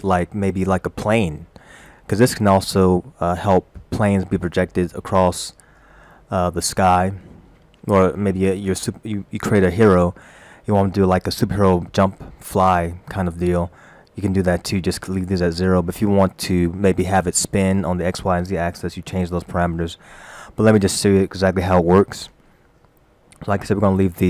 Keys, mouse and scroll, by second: 0.8-1.1 scroll down 1, 9.3 scroll down 1, 10.2 scroll down 1.